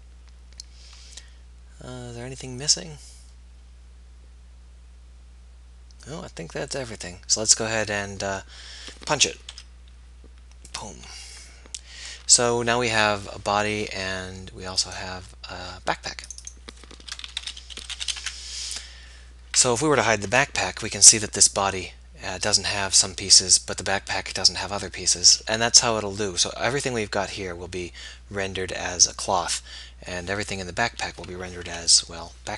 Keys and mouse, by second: 0.0-1.3 middle drag, 7.9-9.6 middle drag, 9.6 p, 12.2 Tab, 15.2-16.4 drag, 19.6-26.0 middle drag, 20.4 h.